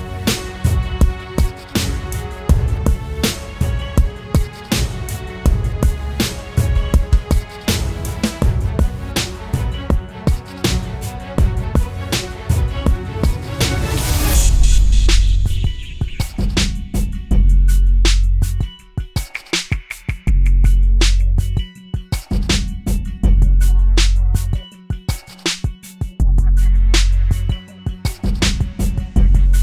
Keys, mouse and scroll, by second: 0.4 typing, 2.6 alt+click, 15.3 double click, 22.7-24.2 scroll down 1, 24.2 scroll up 1.